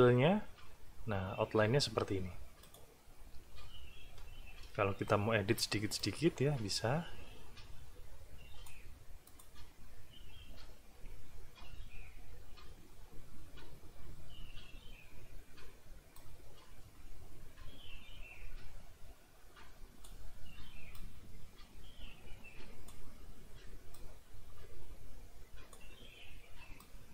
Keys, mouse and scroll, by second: 2.6 click, 4.6 n, 6.0-8.9 drag, 9.3 click, 16.1-20.2 drag, 20.9-23.1 drag, 23.9-25.9 drag, 26.8 click.